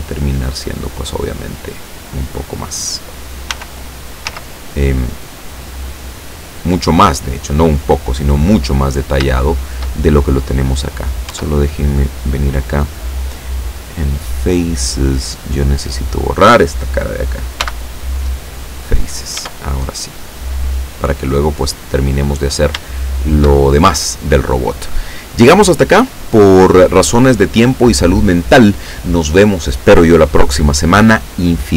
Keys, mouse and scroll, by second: 0.0-2.1 middle drag, 2.2-2.6 scroll up 2, 3.5 s, 4.3 z, 5.9 click, 6.4 scroll down 2, 6.7-8.7 middle drag, 8.8-9.2 scroll up 2, 9.3 shift+middle click, 11.0 right click, 11.3 Tab, 13.6 click, 14.5 scroll up 1, 15.7 right click, 17.7 x, 18.3 click, 19.4 Tab, 20.0 scroll down 1, 20.3 middle click, 21.3-22.3 middle drag, 22.5-22.9 scroll down 1, 22.9 shift+middle click.